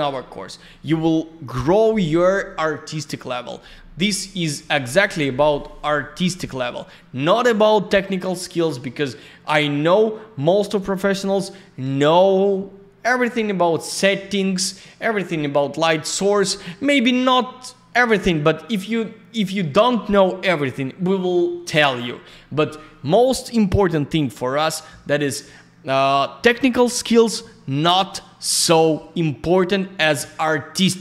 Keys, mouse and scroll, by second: 5.1 click.